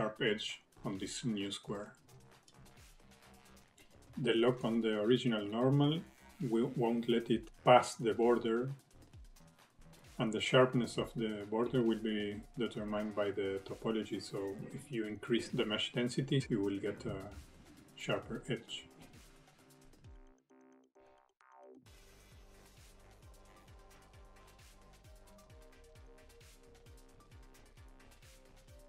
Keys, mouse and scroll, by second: 3.2 scroll up 2, 3.7 shift+middle click, 4.4 click, 7.5-8.0 scroll up 3, 8.0 shift+middle click, 9.2 click, 13.6-14.3 scroll down 6, 14.3-14.7 scroll up 2, 14.7 shift+middle click, 15.6 click, 18.1 shift+middle click, 18.8 click, 19.6 shift+middle click, 19.9 click, 20.5 click, 21.2 shift+middle click, 21.5 scroll down 1, 21.5 middle click, 21.7 shift+middle click, 22.1 click, 22.8 middle click, 23.1 shift+middle click, 23.4 click, 24.0 shift+middle click, 24.2 middle click, 24.4 middle click, 24.8 click, 25.6 scroll down 1, 25.7 middle click, 26.0 scroll up 3, 26.1 middle click, 26.3 shift+middle click, 26.7-27.2 scroll down 3, 26.8 middle click, 27.3 middle click, 27.8 middle click, 28.2 KP_1, 28.4 middle click, 28.7 middle click.